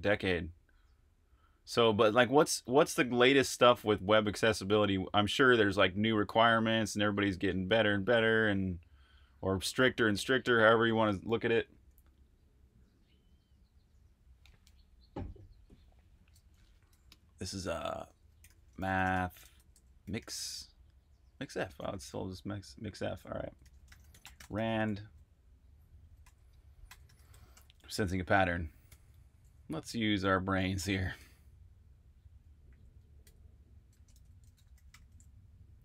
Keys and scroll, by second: 16.6-24.8 typing, 25.9-31.1 typing, 32.4-35.1 typing.